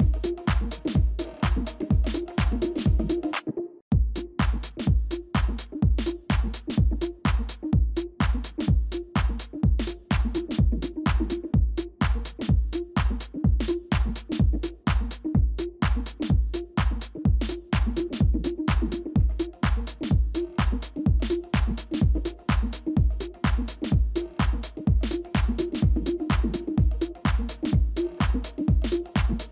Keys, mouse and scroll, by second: 9.6 ctrl+click, 10.7 typing, 13.6 shift+click, 14.9 shift+click, 15.9 shift+click, 16.9 shift+click, 17.9 typing, 20.2 typing, 23.4 shift+click, 24.4 shift+click, 25.4 shift+click, 27.0 shift+click.